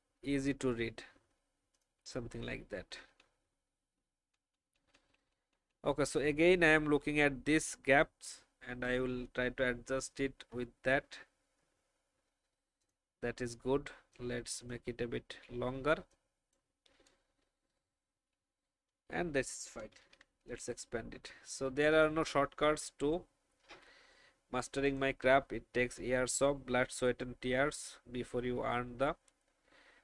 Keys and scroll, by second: 2.7 Down, 2.9 Down, 3.1 Down, 4.3 Down, 4.5 Down, 4.9 Down, 5.3 Down, 17.7 Down, 18.0 Down, 18.1 Down, 18.3 Down, 20.0 ctrl+2, 23.6 Delete.